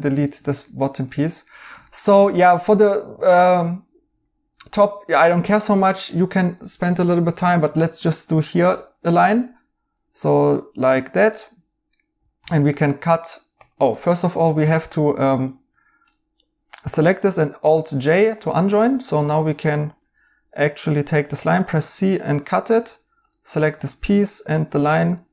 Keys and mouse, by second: 0.4 right click, 5.1 right click, 11.2 a, 11.3 right click, 12.3 c, 13.5 Escape, 13.9 right click, 15.1 Escape, 15.7 Tab, 17.1 alt+j, 18.8 2, 20.3 alt+z, 21.2 c, 22.7 Tab, 24.9 Tab, 24.9 right click.